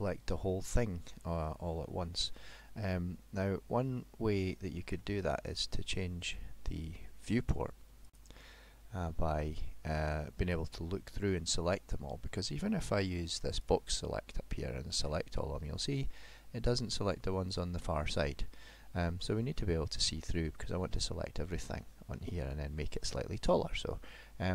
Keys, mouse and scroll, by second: 2.1 middle click, 9.9 middle click, 11.4 middle click, 13.6 click, 14.3 click, 15.8 middle click, 22.2 middle click.